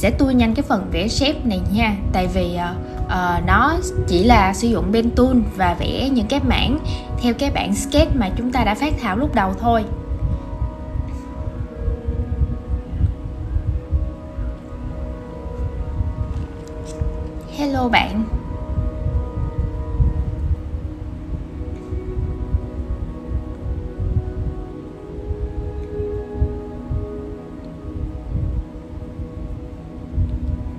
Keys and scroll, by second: 4.8 super+z, 5.9 super+a, 6.3 super+a, 6.5 super+z, 6.7 super+z, 7.8 super+a, 8.1 super+a, 8.3 super+a, 9.8 super+v, 13.8 super+z, 13.9 super+c, 14.3 shift+super+v, 19.2 super+z, 19.5 super+z, 20.3 super+z, 21.4 super+z, 22.1 super+c, 22.2 shift+super+v, 23.8 super+z, 25.7 super+c, 26.8 shift+super+v, 26.9 super+g, 27.2 super+z, 27.9 shift+super+v, 28.0 super+a, 30.3 super+c, 30.4 shift+super+v.